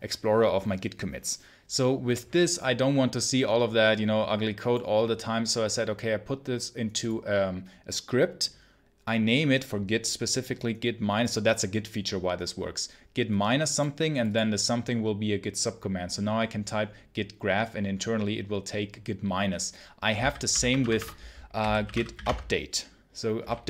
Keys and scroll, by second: 20.1 ctrl+c, 20.4 ctrl+l, 20.7 Return, 21.2-22.5 typing.